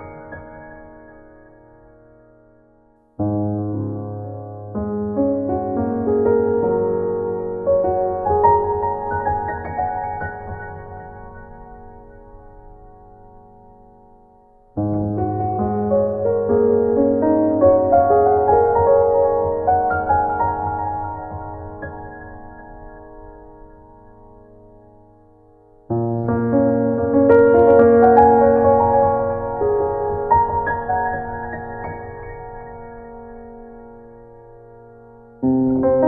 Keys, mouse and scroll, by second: 0.1 ctrl+z, 0.5 ctrl+z, 1.0 ctrl+z, 1.6 ctrl+z, 2.7 ctrl+s, 3.1 ctrl+z.